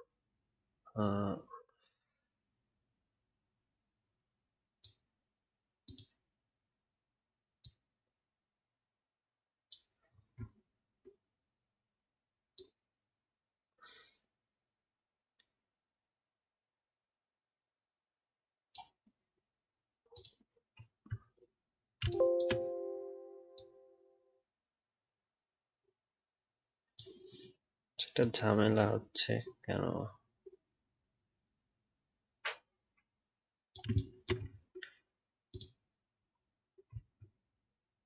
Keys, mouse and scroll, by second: 10.5-12.6 alt+scroll down 1, 34.4 alt+scroll down 1, 34.5 alt+scroll up 3, 37.0-38.0 alt+scroll down 1.